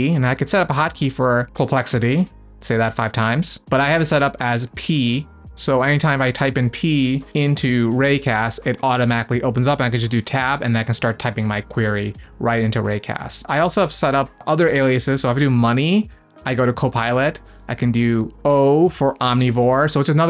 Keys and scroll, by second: 8.1 p, 10.3 Tab, 13.6 Escape.